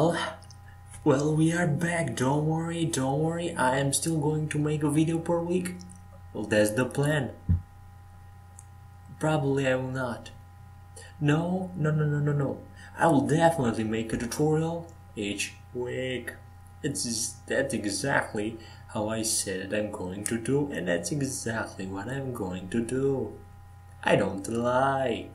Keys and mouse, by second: 0.6 x, 2.7-3.8 right drag, 4.1 right click, 4.5 Tab, 6.6 shift+a, 8.0 click, 9.8-12.8 drag, 12.8 s, 15.1 g, 16.4 e, 17.9 Tab, 18.6 Tab, 19.5 f, 20.8 e, 22.9 Tab, 23.7 Tab.